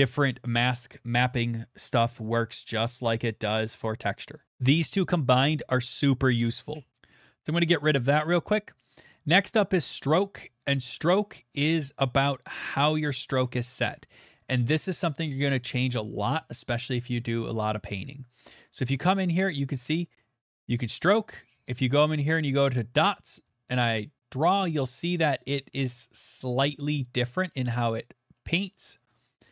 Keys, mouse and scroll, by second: 4.5 click, 6.0 click, 7.6 click, 8.3 click, 9.5 click, 9.9 middle click, 9.9 middle click, 9.9 middle click, 10.0 middle click, 18.8 click, 19.4 click, 20.9 click, 21.6 click, 22.8 click, 24.4 click, 25.6 middle click, 26.5 click, 28.3 middle click, 29.1 click.